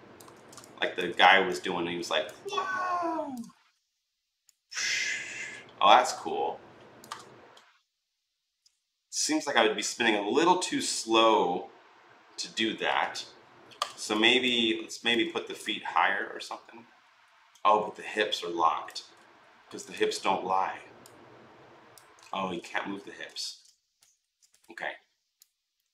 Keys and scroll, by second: 0.1 ctrl+z, 22.1 ctrl+z, 23.2 ctrl+z, 24.0 ctrl+z.